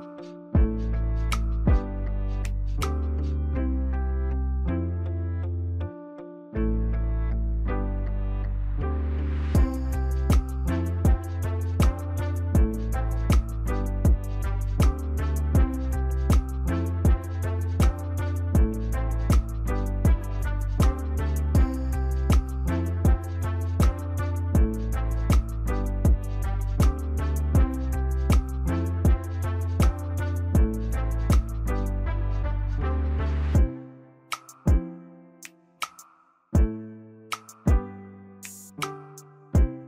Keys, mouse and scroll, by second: 1.3 ctrl+click, 3.9 ctrl+t, 4.7 shift+click, 8.7 ctrl+click, 11.6 ctrl+click, 12.7 ctrl+s, 20.8 right click, 26.5 Delete, 31.9 double click, 36.6 ctrl+s.